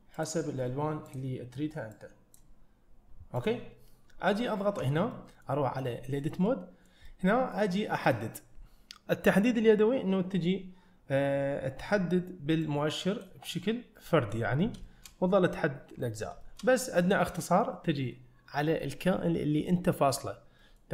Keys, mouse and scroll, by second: 3.4 click, 4.8 Tab, 5.2 middle click, 6.5 middle click, 7.1 middle click, 8.1 click, 12.7 click, 14.0 middle click, 14.9 shift+middle click, 16.1 scroll up 1, 16.5 shift+middle click, 16.8 click, 17.3 middle click, 20.6 middle click.